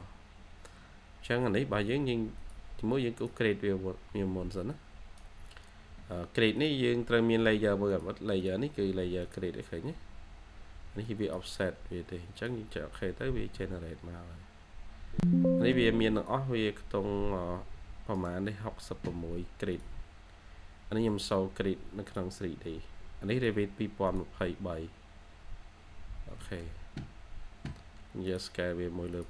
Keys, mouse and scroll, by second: 18.0 right click, 25.7 scroll down 1, 26.3 middle click.